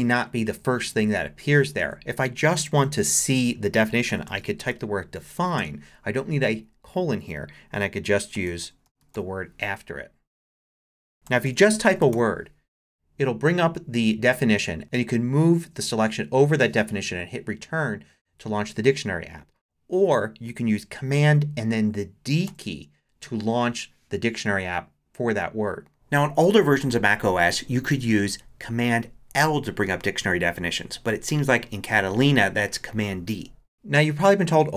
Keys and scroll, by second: 1.8 super+a, 3.7-5.6 typing, 8.1-9.6 typing, 11.1-12.6 typing, 15.5 Down, 15.9 Up, 22.5 super+d.